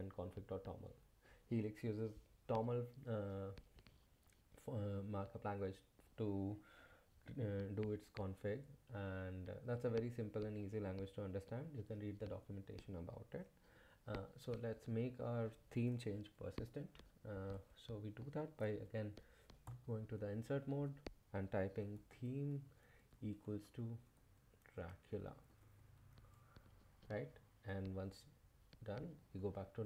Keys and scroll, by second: 19.6 i, 21.4-26.6 typing, 27.0 Return, 27.9-28.6 typing, 28.9 Return, 29.2 Escape.